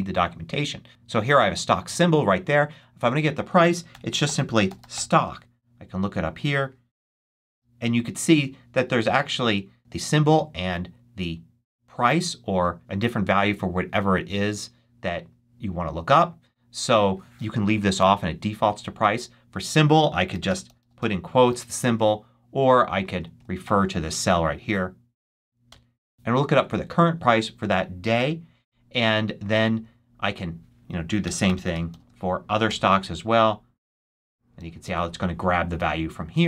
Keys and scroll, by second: 3.6-5.3 typing, 6.6-7.9 typing, 17.7 BackSpace, 20.0-22.5 typing, 25.6 Return, 30.9-32.3 typing, 32.6 shift+Return, 33.8 super+c, 34.7 super+v.